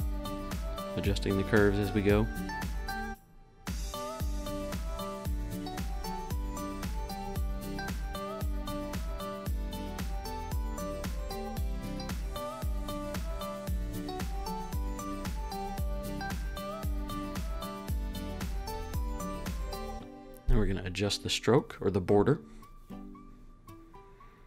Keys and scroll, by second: 10.0 super+z.